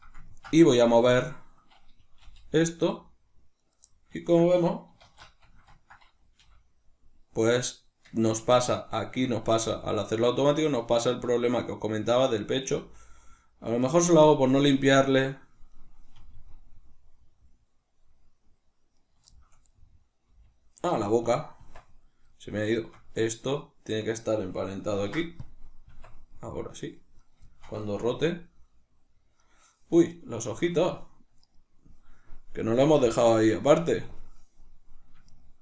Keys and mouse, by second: 0.2-3.6 ctrl+middle drag, 2.1 g, 3.6 right click, 4.0-8.2 ctrl+middle drag, 4.9 alt+q, 6.3 g, 8.2 right click, 8.5-11.9 ctrl+middle drag, 9.5 g, 11.9 click, 12.7 g, 13.8 right click, 15.7 right click, 16.1 r, 18.9 right click, 19.3-20.8 shift+middle drag, 20.2 g, 21.2 right click, 21.5 Tab, 22.2 middle click, 22.7 shift+right click, 23.5-27.1 middle drag, 24.8 ctrl+p, 27.1 right click, 27.4-29.4 shift+middle drag, 28.0 r, 29.4 right click, 30.1 right click, 30.3 Tab, 30.8 right click, 31.3 right click, 35.2 shift+right click.